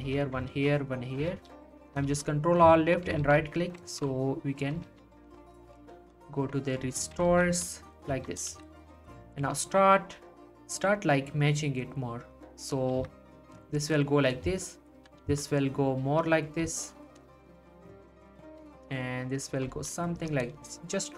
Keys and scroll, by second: 0.0 ctrl+r, 0.5 ctrl+r, 1.3 ctrl+r, 2.0 ctrl+r, 3.2 ctrl+r, 3.9 ctrl+r, 4.9 ctrl+r, 5.4 ctrl+r, 5.9 ctrl+r, 7.3 ctrl+r, 8.5 z, 9.4 s, 15.2 s, 18.5 s, 19.7 g.